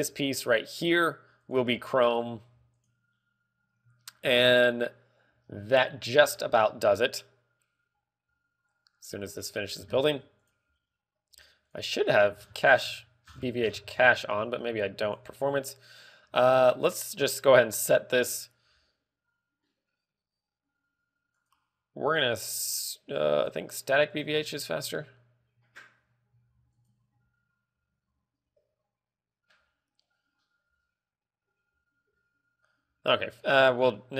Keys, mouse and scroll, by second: 1.0 right click, 1.9 click, 6.0-6.9 scroll up 5, 6.9 shift+middle click, 12.2 click, 12.5 click, 12.9 scroll down 1, 14.2-14.5 scroll down 35, 14.5 scroll up 2, 15.6 click, 15.6 scroll up 2, 21.9 click, 23.9 click.